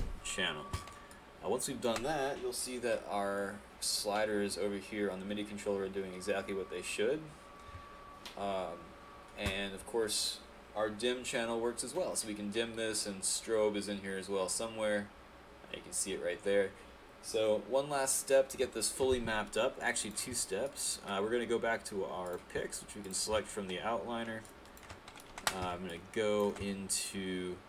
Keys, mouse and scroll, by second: 1.1 click, 19.6 alt+click, 20.7 alt+right click, 24.5 alt+click, 25.7 alt+Tab, 25.9 click.